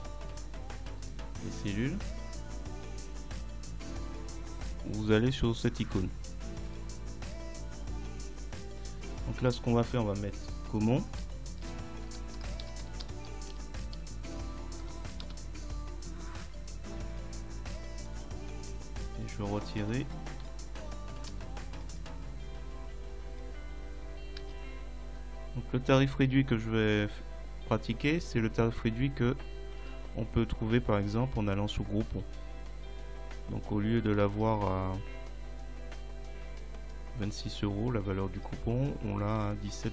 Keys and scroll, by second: 11.7 shift+g, 12.1 a, 14.8 Delete, 15.3 Return, 20.4 Delete, 21.3 Return, 23.6 Delete, 24.4 Return.